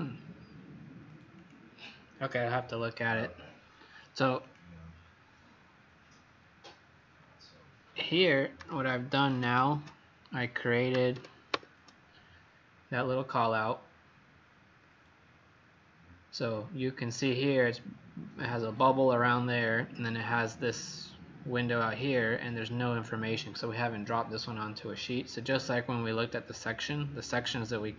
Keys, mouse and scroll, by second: 0.1 scroll down 5, 1.4 click, 9.4 ctrl+shift+Tab, 11.1 ctrl+Tab, 11.5 ctrl+Tab, 13.5 scroll down 4, 25.7 scroll down 4.